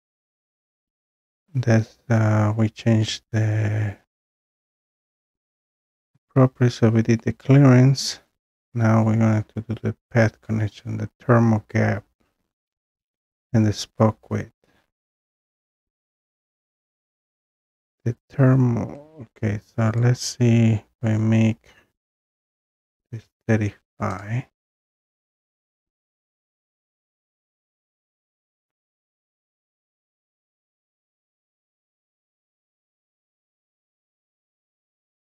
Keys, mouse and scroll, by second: 20.0 click, 22.8-23.2 typing, 26.6-27.5 scroll, 30.6-31.6 scroll, 31.7 click, 32.3 click, 32.8-35.2 scroll down 3.